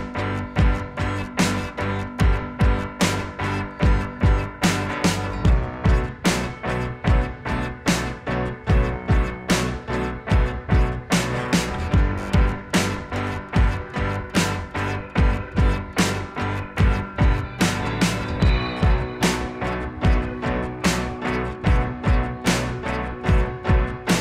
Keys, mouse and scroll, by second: 0.8 click, 5.4 click, 8.4 click, 8.6 shift+click, 9.0 ctrl+g, 9.4 click, 9.8-11.2 typing, 11.8 Return, 12.1 ctrl+alt+shift+e, 13.2 ctrl+alt+shift+e, 13.2 ctrl+z, 13.8 click, 14.7 ctrl+alt+shift+e, 16.2 click, 16.8-19.3 typing, 19.5 click, 20.5 ctrl+j, 22.2 ctrl+z, 22.4 Delete, 23.4 ctrl+Delete, 23.4 ctrl+j.